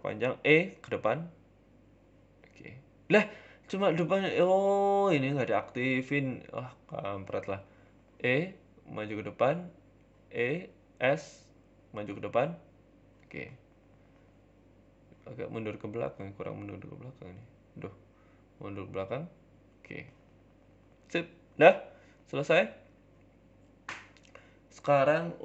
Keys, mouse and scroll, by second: 0.7 e, 2.1 Tab, 2.1 scroll down 3, 2.3 middle click, 3.0 ctrl+z, 3.1 ctrl+z, 4.2 KP_3, 4.6 ctrl+KP_1, 5.1 KP_1, 5.5 scroll up 3, 5.8 click, 6.9 e, 8.1 g, 9.5 e, 9.7 s, 10.1 s, 11.3 e, 12.1 g, 13.9 Tab, 13.9 scroll down 3, 14.1 middle click, 14.6 scroll down 2, 14.7 middle click, 15.2 scroll down 2, 15.4-16.0 scroll up 11, 16.0 Tab, 16.5 click, 17.2 shift+middle click, 17.8 click, 18.5 g, 19.7 Tab, 19.8 scroll down 1, 19.9 middle click, 20.3-20.7 scroll down 10, 20.7 middle click, 21.1-21.5 scroll down 2, 21.4 middle click, 22.0 scroll up 2, 22.1 shift+middle click, 22.4 middle click, 23.0 shift+middle click.